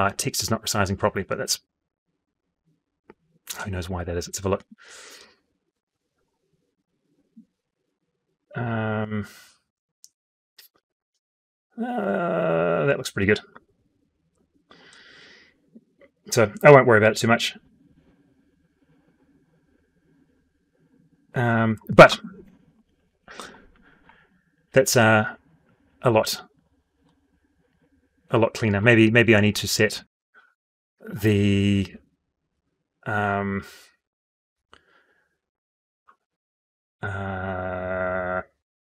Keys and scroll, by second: 5.4 F12.